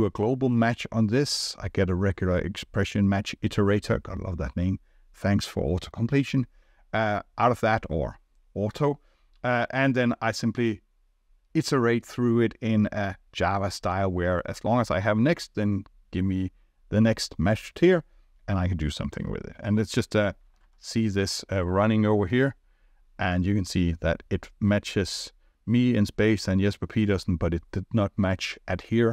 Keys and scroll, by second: 22.4 ctrl+r.